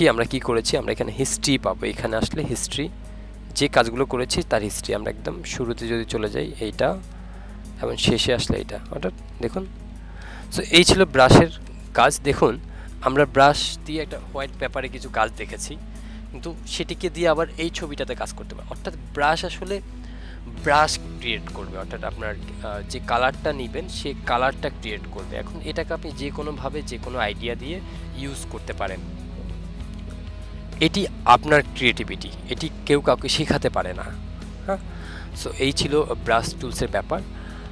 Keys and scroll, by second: 7.7 ctrl+z.